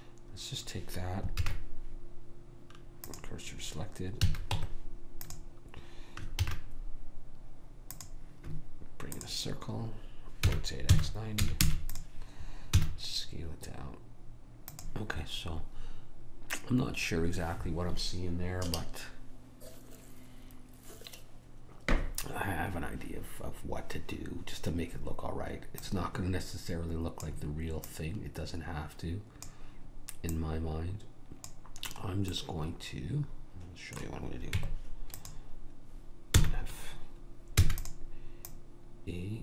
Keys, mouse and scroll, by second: 1.5 shift+s, 4.3 a, 4.6 Tab, 6.5 shift+a, 10.5 r, 12.8 s, 25.9 click, 32.4-34.6 middle drag, 34.6 Tab, 36.4 f, 37.7 e, 38.5 click.